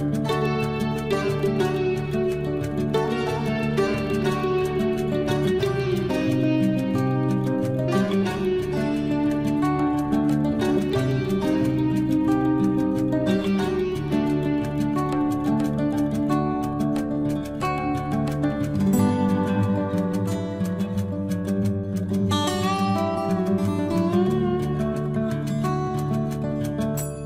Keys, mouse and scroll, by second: 0.0 scroll up 1, 1.0 click, 2.0 scroll down 1, 3.0 scroll up 1, 3.7 click, 4.1 scroll down 1, 8.1 space, 8.3 click, 8.6 middle click, 8.7 middle click, 10.3 scroll down 1, 10.5 middle click, 11.4 scroll up 1, 13.1 p, 13.6 scroll up 1, 15.2 click, 15.3 click, 17.4 1, 18.7-20.0 typing, 20.1 Return, 21.1 middle click, 22.3-22.8 scroll down 1, 23.8 ctrl+s.